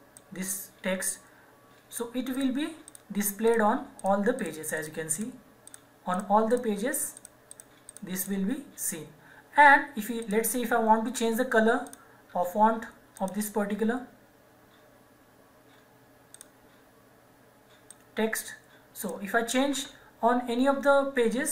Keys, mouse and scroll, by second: 0.2 click, 16.3 click.